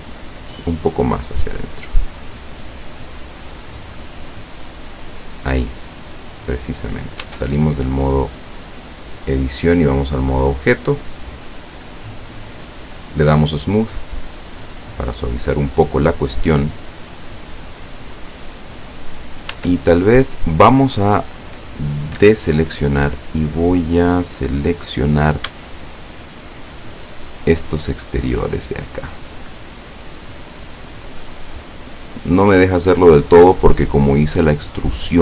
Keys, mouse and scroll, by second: 1.1 click, 2.1-3.4 middle drag, 3.9-5.5 drag, 5.6-6.8 middle drag, 7.9 Tab, 7.9-8.2 scroll down 2, 8.9-10.9 middle drag, 11.3-12.1 scroll up 2, 13.7 click, 14.7 scroll down 2, 18.7-19.3 scroll up 2, 19.6 Tab, 22.2 a, 25.8 alt+shift+right click, 27.2 alt+shift+right click, 28.5 alt+shift+right click, 30.3 alt+shift+right click, 31.0 alt+shift+right click, 32.3 alt+shift+right click, 33.5 alt+shift+right click, 34.8 alt+shift+right click.